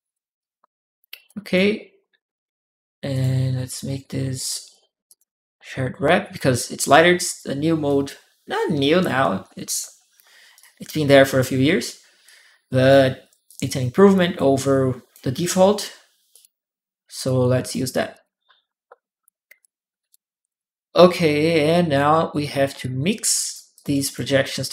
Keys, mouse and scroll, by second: 0.2 click, 1.0 click, 2.9 click, 4.9 click, 7.7-9.2 drag, 10.3 right click, 10.4 click, 12.0 click, 13.3-14.9 drag, 16.1 click, 17.0 click, 17.9 click, 19.4 click, 20.3 click, 22.6 click, 23.5 click, 23.7 right click.